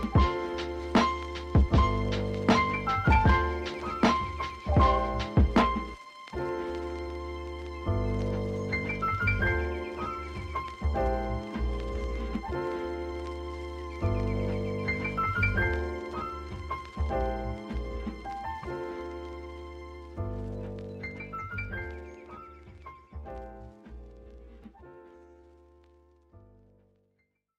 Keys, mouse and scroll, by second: 3.0-4.5 shift+drag, 4.6 g, 5.6 KP_0, 6.4 scroll up 1, 7.1-8.6 shift+drag, 9.4-10.0 scroll up 1, 10.0-11.4 shift+drag, 11.7 shift+click, 12.4 2, 12.9 Tab, 13.3 Tab, 13.4 click, 13.7 shift+click, 14.0 s, 16.2 ctrl+v, 16.3 g, 17.0 click, 18.1-19.7 drag, 21.2-21.7 scroll down 1, 21.7 Tab, 22.2-22.6 BackSpace, 22.8 u, 23.1 Tab, 23.7 r, 24.6 g, 25.6 ctrl+c, 25.7 ctrl+v, 25.8 g, 26.3 r, 26.9 g.